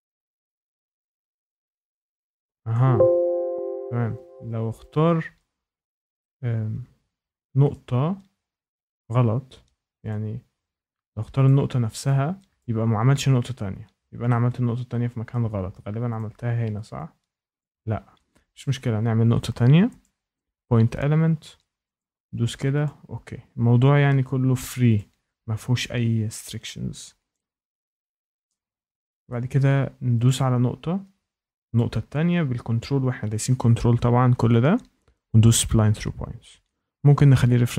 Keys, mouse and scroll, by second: 0.1 shift+middle click, 2.7 click, 3.3 ctrl+z, 4.8 click, 5.5 scroll up 4, 5.6-5.9 scroll, 7.6 shift+right click, 10.0 click, 10.4 scroll, 11.4 click, 12.5 click, 13.0 ctrl+z, 15.2 shift+middle click, 16.1 click, 17.5 click, 17.9 ctrl+z, 20.0 click, 21.9 click, 22.8 click, 23.5 Escape, 24.9 click, 27.3 click, 28.0 scroll, 29.2 shift+middle click, 30.2 click, 31.5 scroll, 31.7 ctrl+click, 35.4 click.